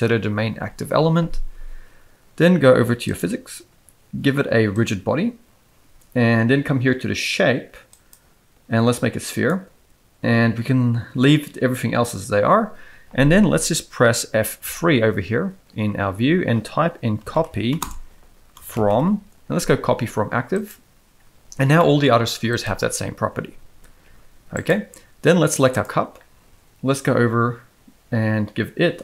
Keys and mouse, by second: 8.0-9.5 drag, 14.8 F3, 21.8-22.1 middle drag, 22.5 click, 24.0 g.